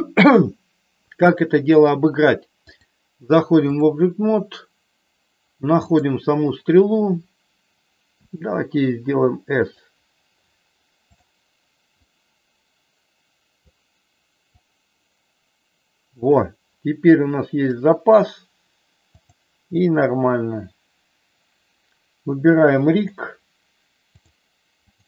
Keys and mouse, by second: 2.8-4.0 drag, 8.1 s, 11.1 click, 12.1-13.6 drag, 14.6-16.2 drag, 19.3-20.8 drag, 23.0 click, 24.1-25.0 drag.